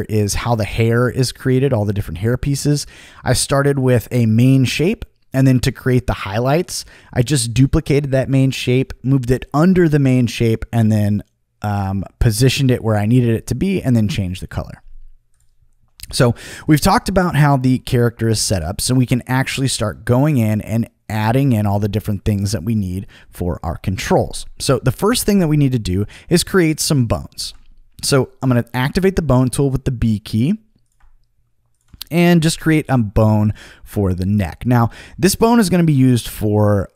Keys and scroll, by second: 27.4 b, 32.4 t.